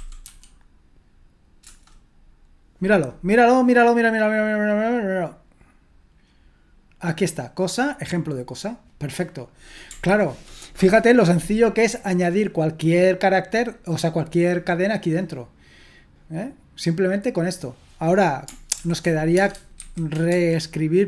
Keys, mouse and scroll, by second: 0.0-0.7 typing, 1.7 Return, 7.4-17.4 drag, 18.8 ctrl+p, 19.4-20.3 typing.